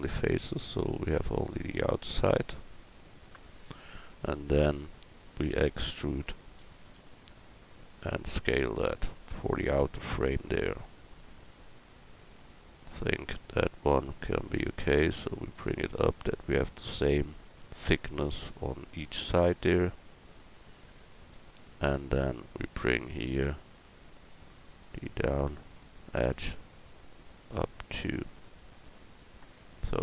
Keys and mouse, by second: 3.2-5.5 drag, 5.5 e, 14.7-20.2 middle drag, 24.2-29.2 drag, 25.8-29.2 right drag, 29.6-30.0 middle drag.